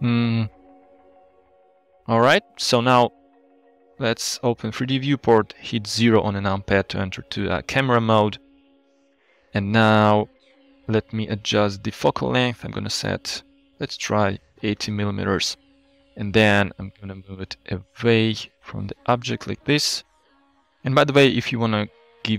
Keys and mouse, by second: 0.4-1.0 middle drag, 1.3 shift+middle drag, 1.6-2.2 middle drag, 3.7-4.8 drag, 5.9 KP_0, 9.1 n, 12.1-14.8 drag, 16.4 middle click, 16.5 click, 17.4 g, 17.6 y, 20.4 middle drag, 20.9-21.4 middle drag.